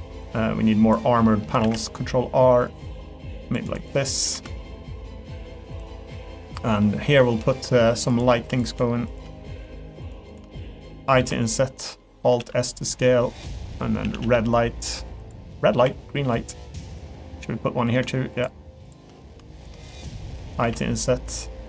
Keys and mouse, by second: 0.3 click, 1.2 middle click, 1.6 ctrl+r, 4.0 middle click, 4.3 3, 4.5 middle click, 5.0 middle click, 6.1 middle click, 6.8 middle click, 7.2 shift+middle click, 7.5 middle click, 8.6 click, 9.1 shift+click, 9.3 middle click, 10.3 shift+middle click, 10.5 middle click, 12.0 middle click, 12.4 alt+s, 14.0 a, 14.2 g, 15.5 middle click, 15.9 3, 16.0 middle click, 16.9 click, 17.1 middle click, 19.6 shift+click, 19.8 middle click.